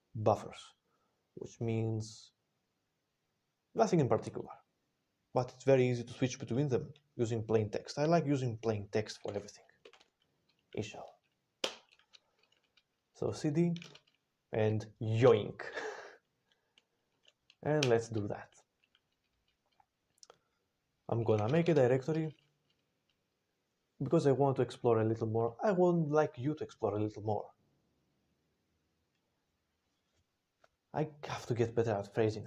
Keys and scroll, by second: 11.2-12.0 typing, 13.4-14.1 typing, 15.1 ctrl+y, 15.1 ctrl+p, 15.1 typing, 16.7 ctrl+n, 17.7 Return, 20.9-21.6 typing.